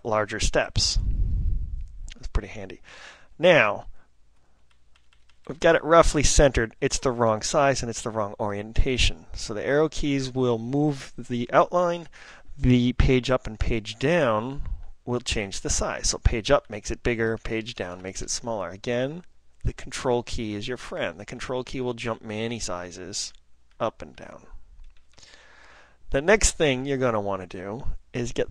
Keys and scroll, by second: 0.1 ctrl+Up, 0.4 ctrl+Up, 0.7 ctrl+Up, 1.1 ctrl+Up, 1.5 ctrl+Up, 5.2 ctrl+Left, 5.6 ctrl+Left, 5.7 ctrl+Left, 5.8 ctrl+Left, 6.0 ctrl+Left, 6.1 ctrl+Left, 7.1 ctrl+Up, 9.7 ctrl+Right, 15.3 Page_Up, 15.7 Page_Up, 15.8 Page_Up, 16.3 Page_Up, 16.4 Page_Up, 16.9 Page_Up, 18.0 Page_Down, 19.1 Page_Down, 20.5 ctrl+Page_Up, 21.0 ctrl+Page_Up, 21.3 ctrl+Page_Up, 21.8 ctrl+Page_Up, 24.1 ctrl+Page_Down, 24.6 ctrl+Page_Down, 25.4 ctrl+Page_Down, 26.2 ctrl+Page_Up, 27.1 ctrl+Page_Up.